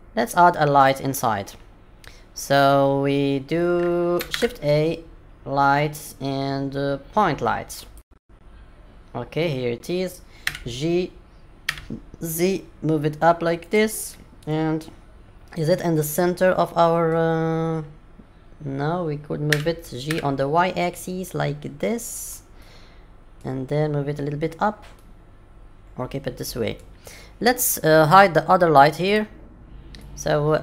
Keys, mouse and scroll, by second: 0.1-0.7 scroll up 2, 0.7-1.5 scroll up 1, 4.3 shift+a, 10.4 g, 14.0 middle click, 19.5 g, 22.5 middle click, 24.9 middle click, 29.0 click, 29.9 middle click.